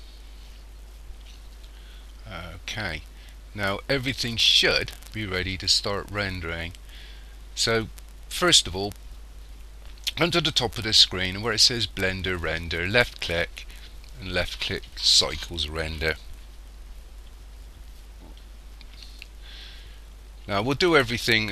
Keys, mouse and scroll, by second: 12.9 click.